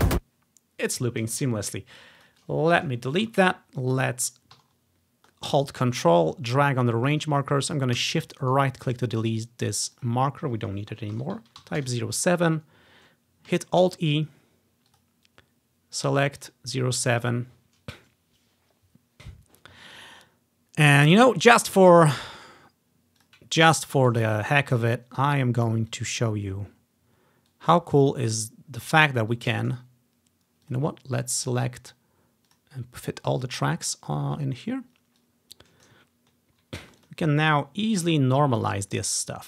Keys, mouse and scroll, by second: 0.1 alt+d, 2.3-4.4 drag, 3.4 Delete, 6.3 click, 7.4-8.6 drag, 9.9-11.8 drag, 11.3-11.8 typing, 11.9 Return, 14.0 alt+e, 15.0-17.6 drag, 23.3-24.5 drag, 23.9 scroll down 1, 26.1-28.4 drag, 26.5-26.9 scroll up 1, 26.9 scroll down 1, 29.5 click, 30.8 click, 31.6 click, 32.6 click, 33.1 click, 34.1-34.5 scroll up 1, 35.4-37.3 drag, 36.3 scroll down 2.